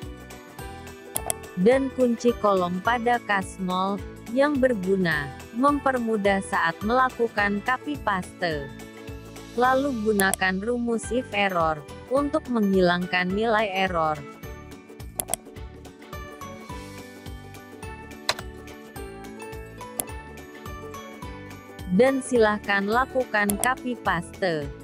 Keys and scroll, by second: 2.8 F4, 17.3 ctrl+shift+Return.